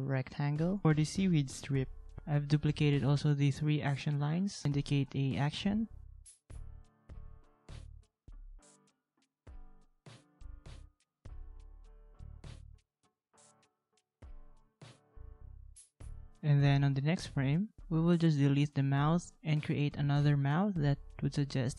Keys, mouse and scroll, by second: 2.5 ctrl+a, 4.4 ctrl+a, 6.2 alt+click, 7.7 alt+click, 11.0 ctrl+shift+g, 11.6 ctrl+c, 11.7 ctrl+z, 12.7 ctrl+v, 14.3 ctrl+g, 18.1 ctrl+x, 19.9 ctrl+z.